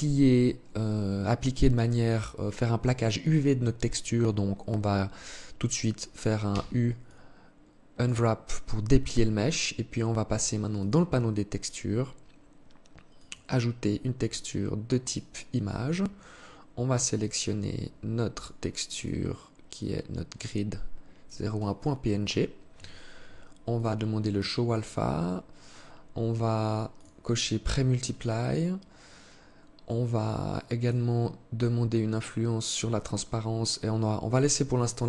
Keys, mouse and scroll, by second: 5.6 u, 9.8 click, 12.2 click, 15.2-15.7 scroll down 6, 16.2 click, 21.0 click, 22.9 click, 26.2 click, 27.3-27.7 scroll down 3, 28.0-29.6 scroll down 3, 30.0 click, 34.4-35.0 scroll up 11.